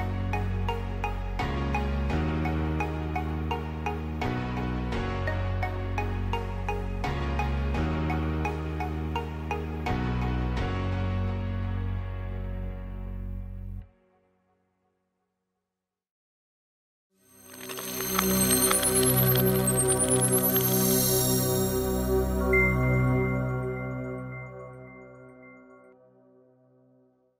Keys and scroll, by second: 1.6 space, 8.8 space, 12.2 space, 12.2 v, 12.4 space, 16.2 space.